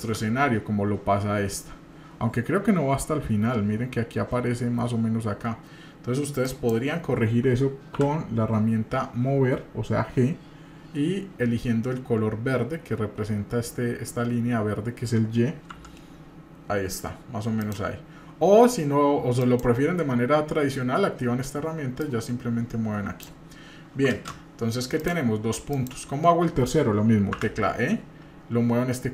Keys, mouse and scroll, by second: 0.0 ctrl+space, 6.4 click, 7.9 g, 19.4 click, 22.0-23.3 drag, 24.1 ctrl+space.